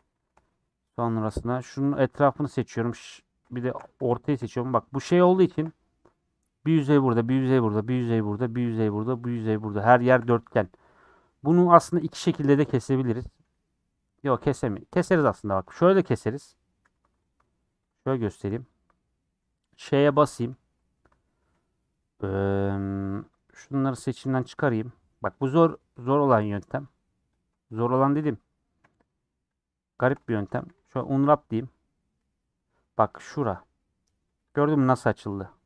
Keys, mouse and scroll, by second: 0.1 shift+middle click, 0.6 scroll up 1, 0.9 middle click, 1.4 3, 4.5 middle click, 5.1 scroll up 2, 5.4-11.1 shift+middle drag, 11.1 scroll up 1, 12.6-15.5 shift+middle drag, 15.5 2, 16.0 Left, 16.3 Left, 16.8 3, 17.3 alt+Left, 18.7 alt+Left, 20.0 ;, 23.3 shift+Left, 23.7 shift+Left, 24.3 shift+Left, 24.5 shift+middle click, 25.3 shift+Left, 25.9-27.4 middle drag, 27.4 Left, 28.4-29.5 middle drag, 29.5 shift+Left, 30.0 shift+Left, 30.4 a, 30.7 u, 32.4-34.5 middle drag, 34.5 click, 35.5 middle click.